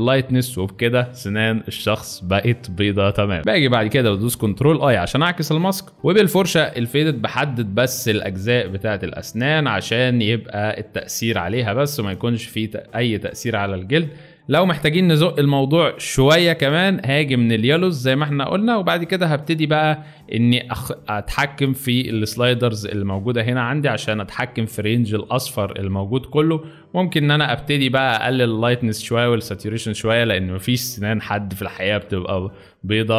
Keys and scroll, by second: 4.6 ctrl+i, 6.0 ctrl+z.